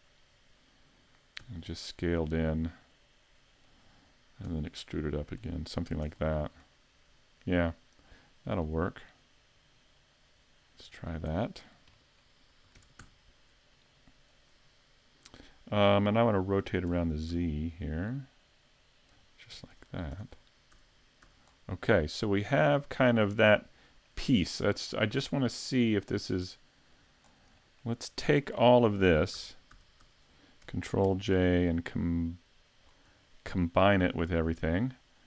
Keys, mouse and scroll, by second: 1.4 s, 3.8 click, 4.5 e, 5.6 click, 5.9 a, 6.1 Tab, 6.2-6.6 scroll down 4, 6.6 middle click, 8.5 click, 10.0 click, 11.6 scroll down 3, 12.0 middle click, 12.8 shift+d, 14.4 click, 16.9 r, 19.2 click, 19.5 a, 19.7 Tab, 20.1 Tab, 20.4-20.8 scroll down 3, 20.8 a, 21.2 a, 21.5-21.9 scroll down 2, 21.9 middle click, 22.4 scroll down 1, 22.8 shift+middle click, 23.3 middle click, 23.9 shift+middle click, 24.9-25.4 scroll down 6, 26.2 middle click, 27.3-27.6 scroll down 2, 27.6 shift+middle click, 28.1 middle click, 28.8 shift+middle click, 29.4 a, 29.8 a, 30.0 a, 31.1 ctrl+j, 32.8-33.2 scroll up 5, 33.3 shift+middle click, 34.8 middle click.